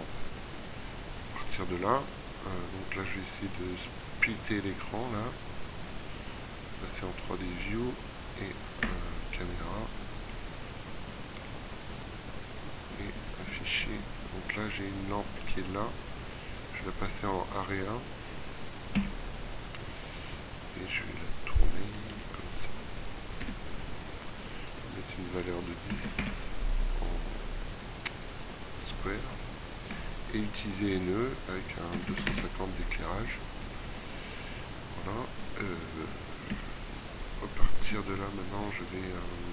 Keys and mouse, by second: 8.8 KP_0, 15.4-16.8 right drag, 17.4-18.6 middle drag, 18.6 KP_7, 22.2 r, 23.0 click, 23.5 g, 24.4 click, 33.6 middle click, 36.4 KP_1, 37.9 r, 38.8 click.